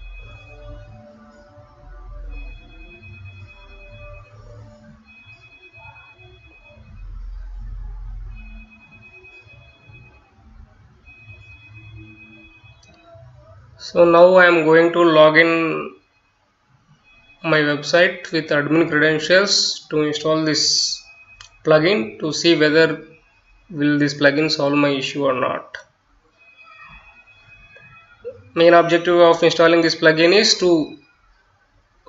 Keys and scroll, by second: 0.0-2.8 typing, 4.1-18.8 typing, 19.9-24.9 typing, 25.0 Return, 30.2 /, 31.9 BackSpace.